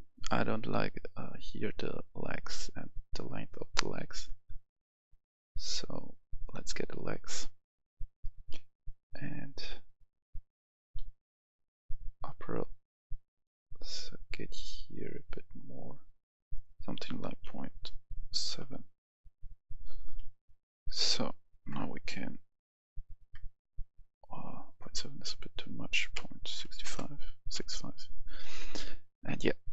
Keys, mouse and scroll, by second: 6.3 click, 10.9-12.5 scroll down 1, 12.5-16.5 drag, 18.3 typing, 18.5 Return, 20.1-20.7 scroll down 1, 20.7-21.4 scroll up 1, 21.7 KP_0, 25.3 click, 26.6 typing, 26.8 Return, 28.9-29.5 scroll down 1.